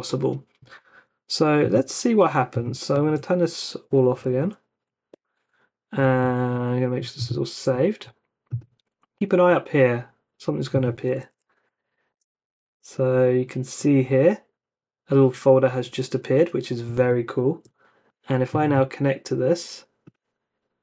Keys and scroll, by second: 3.0 ctrl+c, 4.4 Up, 5.1 Return, 7.8 super+s, 11.2 Up, 12.1 Return, 16.9 super+Tab.